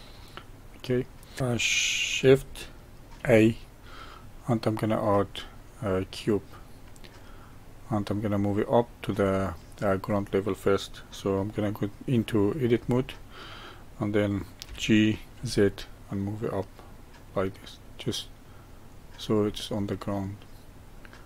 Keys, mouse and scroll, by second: 0.8 click, 1.4-3.2 middle drag, 3.2 shift+a, 7.2-9.1 middle drag, 9.1-10.1 scroll up 1, 10.1-10.9 scroll up 1, 10.9-12.1 scroll up 1, 12.8 Tab, 14.6 g, 19.4-21.2 middle drag.